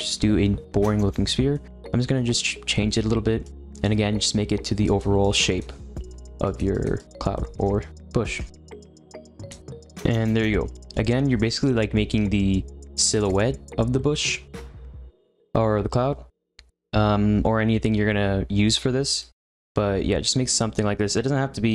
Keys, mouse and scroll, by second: 0.6-3.4 middle drag, 3.4-5.8 drag, 5.8 middle click, 6.1-7.3 drag, 7.3-9.1 middle drag, 9.1 click, 9.7-13.9 shift+middle drag, 15.3-19.1 shift+middle drag, 19.2-21.7 shift+middle drag.